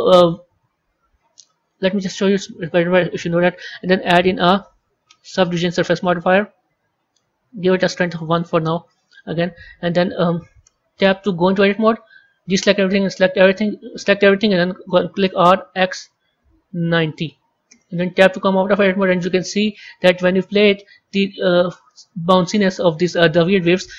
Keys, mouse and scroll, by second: 3.4-6.3 drag, 6.3-8.2 scroll down 8, 8.2-9.0 drag, 9.0-11.2 scroll up 4, 11.2 Tab, 12.1 a, 12.4 a, 14.6 r, 18.1 Tab, 19.2-19.7 scroll up 2, 20.4-23.5 drag.